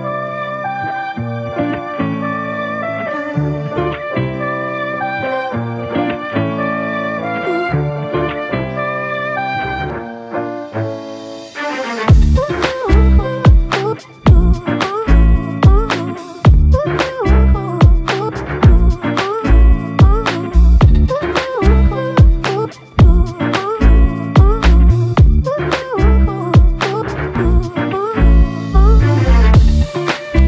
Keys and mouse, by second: 2.0 double click, 6.0 alt+click, 8.4 double click, 9.5 alt+click, 14.9 alt+click, 16.8 double click, 17.4 alt+click, 19.7 double click, 20.6 alt+click, 23.6 alt+click, 24.7 typing, 26.8 double click, 28.5 alt+click.